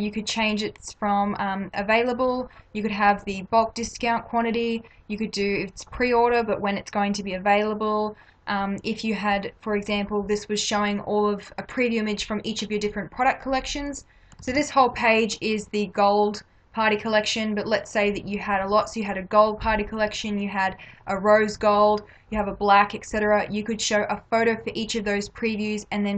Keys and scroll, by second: 14.5 ctrl+-.